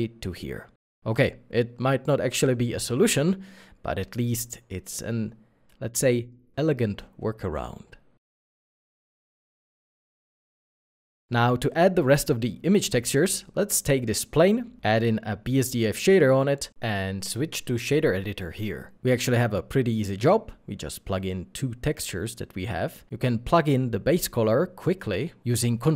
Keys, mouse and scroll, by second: 19.5 middle click, 20.2-20.8 scroll up 1, 21.3-21.9 scroll up 1.